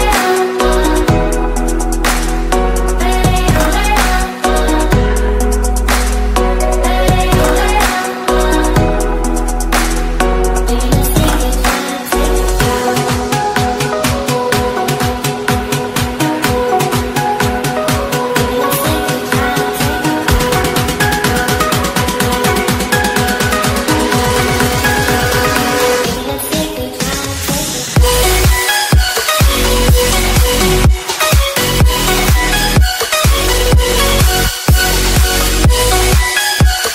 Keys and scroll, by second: 2.8 ctrl+space, 23.6 ctrl+space, 33.3 ctrl+a.